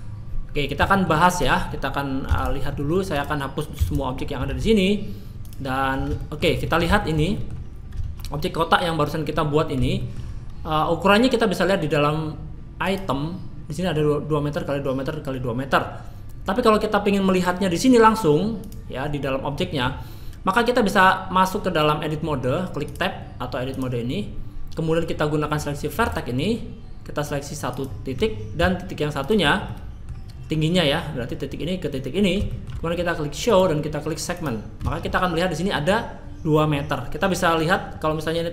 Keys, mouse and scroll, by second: 0.9 shift+middle click, 1.3 click, 1.7 scroll down 2, 2.3 x, 2.8 middle click, 3.1 click, 3.8 x, 4.5 shift+a, 5.7-6.1 scroll up 2, 6.2 shift+middle click, 6.6 middle click, 7.0 shift+middle click, 7.3 middle click, 10.0 shift+middle click, 12.8 click, 17.3 click, 18.6 click, 19.6 middle click, 22.8 click, 26.0 click, 27.7 click, 29.2 shift+click, 29.7 middle click, 32.4 shift+middle click, 33.4 click, 34.3 click, 34.9 shift+middle click, 35.2-35.7 scroll up 2, 35.7-36.5 scroll down 1.